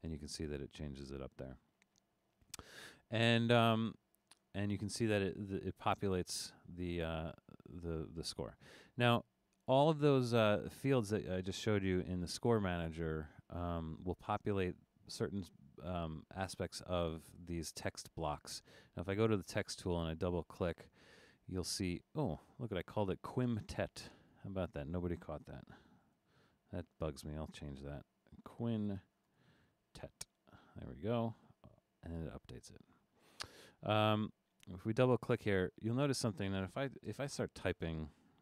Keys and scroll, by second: 26.0 super+k, 28.5 Right, 29.3 BackSpace, 29.6 n, 37.0 space.